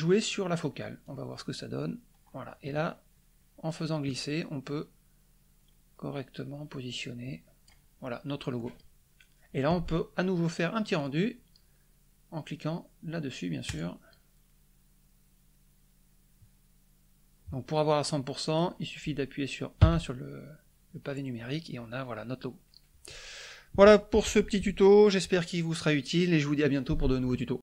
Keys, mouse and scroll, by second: 1.0-7.8 drag, 10.9 click, 13.6 click, 18.4 click, 19.8 KP_1.